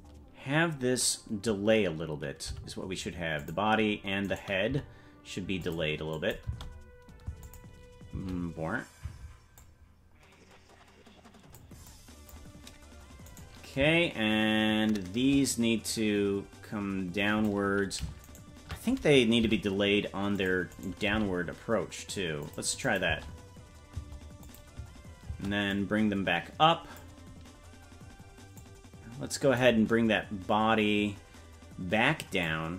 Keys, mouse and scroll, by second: 2.4 g, 4.3 right click, 4.7 g, 6.1 click, 6.4 space, 7.4 click, 7.4 space, 8.1 space, 9.0 space, 9.6-11.6 drag, 11.9 click, 13.3 right click, 15.9-17.5 drag, 18.3 shift+right click, 19.4 g, 20.7 right click, 21.1 g, 22.8 click, 23.0 space, 24.4 click, 24.7 space, 25.3 space, 25.7-27.0 drag, 28.6-29.6 drag, 32.4-32.7 drag.